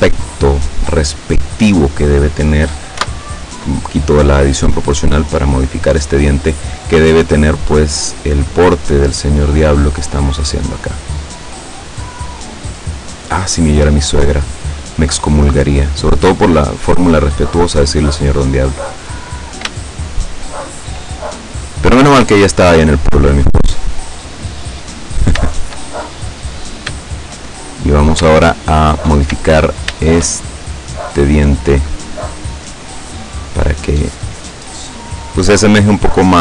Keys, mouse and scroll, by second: 0.0-0.4 scroll up 1, 1.2 right click, 3.0 o, 4.7-6.0 drag, 6.4 right click, 6.8-9.3 drag, 10.1 right click, 10.7-11.8 drag, 12.8 right click, 13.4-14.4 drag, 14.7 right click, 15.3 click, 16.6-17.7 drag, 17.8 right click, 18.4 click, 19.8-21.1 shift+middle drag, 22.9 right click, 23.6 click, 25.0 right click, 25.5 shift+right click, 26.1 shift+click, 28.6 shift+right click, 30.1 shift+right click, 30.8-32.2 drag, 32.6 right click, 33.2 click, 34.5 right click, 35.3 click, 36.2 right click.